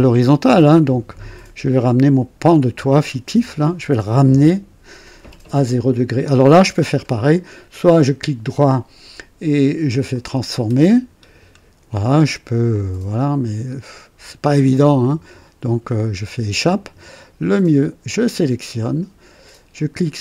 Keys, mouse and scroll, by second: 8.7 right click, 10.0 click, 11.0-11.4 scroll down 2, 12.6-16.4 drag, 16.4 Escape, 18.0 click.